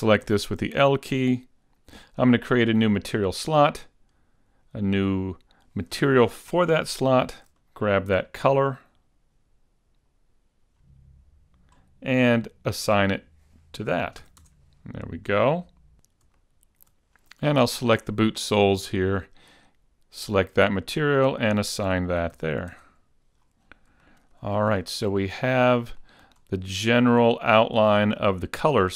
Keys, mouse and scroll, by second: 0.4 l, 1.4 middle click, 1.4 scroll up 5, 3.5 click, 4.8 click, 5.8 click, 7.1 scroll down 7, 7.7 click, 11.8-13.0 scroll up 4, 13.0 click, 14.3 a, 14.8 Tab, 15.4 middle click, 15.9-16.3 scroll down 4, 16.5 shift+middle click, 19.0 click, 21.2 click, 22.4 a, 23.0 Tab, 23.5-24.1 scroll down 4, 24.1 shift+middle click, 24.7 scroll down 1, 24.9 shift+middle click, 25.4 middle click, 26.1 shift+middle click, 26.7-27.1 scroll up 3, 27.1-27.6 scroll down 3, 27.6 shift+middle click, 28.2 middle click.